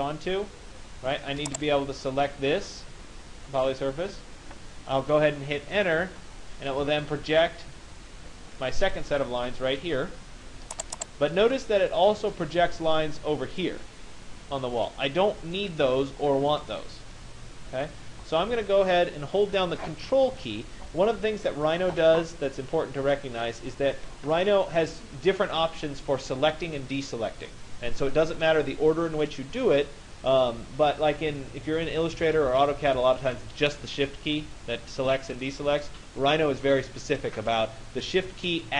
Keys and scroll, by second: 5.6 Return.